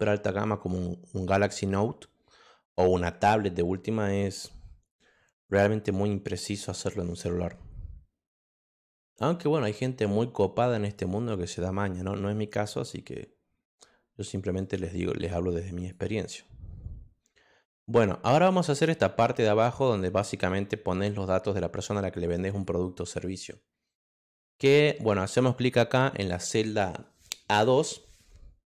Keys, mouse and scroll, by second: 8.7 click, 14.6 click, 15.7 click, 17.6 click, 22.4 click, 23.2 click, 24.8 click.